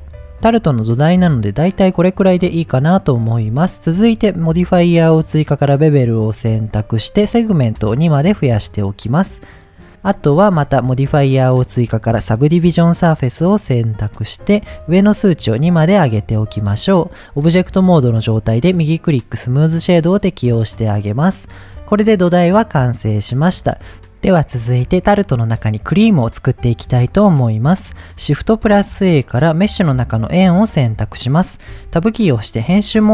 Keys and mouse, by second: 0.0 click, 0.5-2.6 middle drag, 5.8 click, 8.0 click, 13.4 click, 16.0 click, 16.7-17.1 middle drag, 18.8 right click, 19.9-21.0 middle drag, 28.4 shift+a, 32.0 Tab.